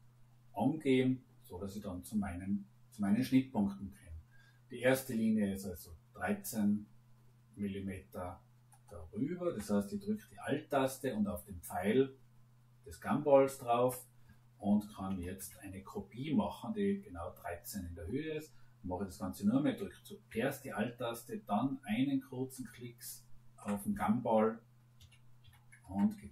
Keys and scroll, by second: 14.8 1, 15.1 3, 15.3 Return, 24.9 2, 25.4 9, 25.7 Return.